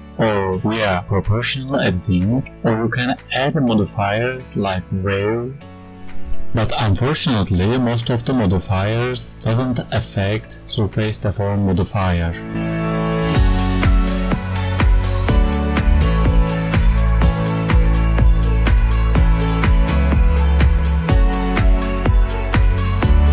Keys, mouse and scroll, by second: 21.8 click, 22.3 click, 22.9 click.